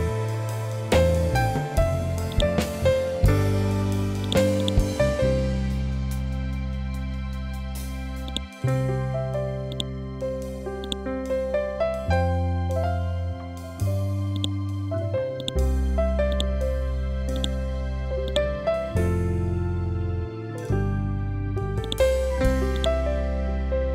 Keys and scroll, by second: 12.3 ctrl+End, 22.8 ctrl+End.